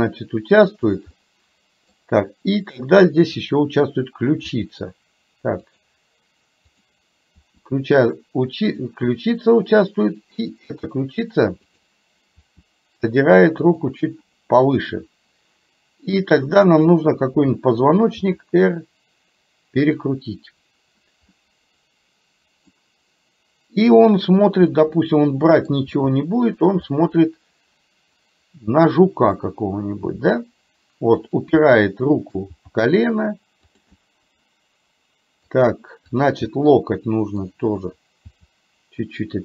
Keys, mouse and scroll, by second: 1.2 middle click, 3.5 click, 4.6 r, 6.7 click, 7.5 r, 10.6 click, 11.8 click, 12.5 r, 16.8 click, 18.2 r, 21.5-22.8 middle drag, 24.0 click, 24.8-25.8 middle drag, 26.0 g, 27.1-29.5 middle drag, 30.1 g, 31.7 middle click, 32.7 g, 34.1-35.6 middle drag, 36.2 click, 36.6 middle click, 38.5 g.